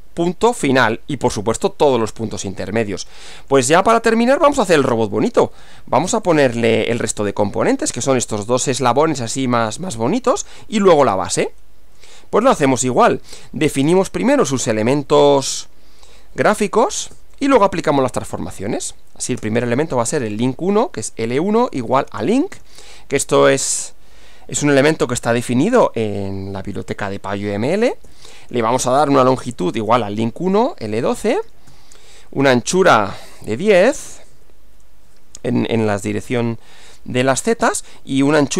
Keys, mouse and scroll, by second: 2.6-3.7 middle drag, 3.9-5.0 middle drag, 6.3 click, 11.4 click, 12.9 click, 13.7 Return, 16.9-18.8 typing, 19.9 space, 21.5-23.1 typing, 28.1-34.3 typing, 38.3-38.5 typing.